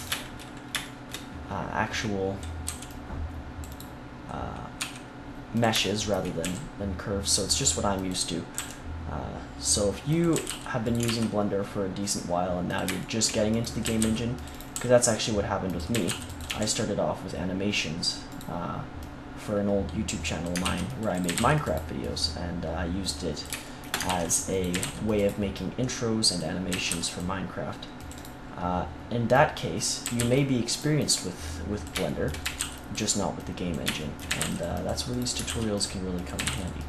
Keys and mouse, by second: 0.1-1.9 middle drag, 2.6 c, 4.7 e, 6.4 g, 8.0 click, 8.5 g, 10.3 a, 10.4 c, 11.0 ctrl+r, 13.8 a, 13.9 c, 14.7 g, 15.9 a, 16.0 c, 16.4 g, 20.1 click, 20.6 ctrl+r, 21.2 a, 21.3 c, 24.0 ctrl+r, 24.5 click, 24.7 a, 24.7 c, 26.6 a, 26.8 c, 28.5-30.4 right drag, 29.3-30.3 drag, 30.0 a, 30.1 c, 31.0-32.7 drag, 32.4 a, 32.5 c, 33.3-34.3 drag, 34.2 a, 34.3 c, 35.4 ctrl+r, 36.3 a, 36.4 c.